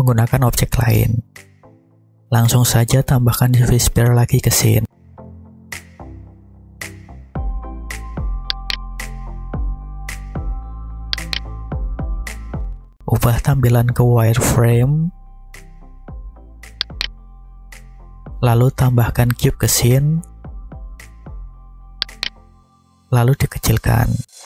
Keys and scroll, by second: 5.6 shift+a, 9.8 `, 20.6 shift+a.